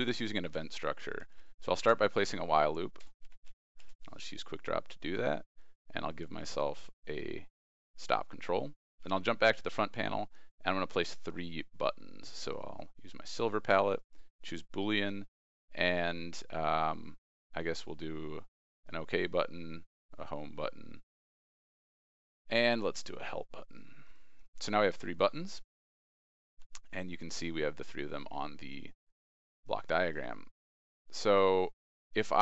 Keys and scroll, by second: 1.0 ctrl+space, 9.0 ctrl+e, 26.7 ctrl+e.